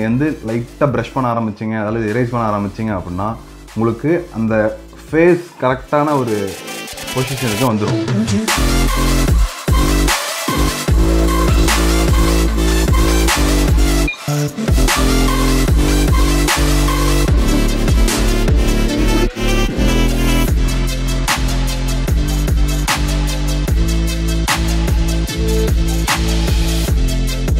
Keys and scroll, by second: 10.7 ctrl+z, 10.9 ctrl+space, 20.5 ctrl+space, 23.2 ctrl+z.